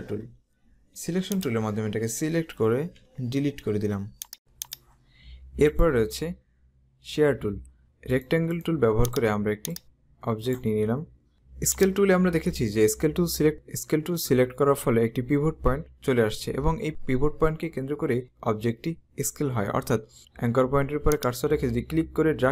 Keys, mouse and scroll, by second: 1.5 click, 3.2 Delete, 4.1 click, 4.4 click, 5.6 right click, 8.2 right click, 9.0 click, 11.9 click, 21.2 click.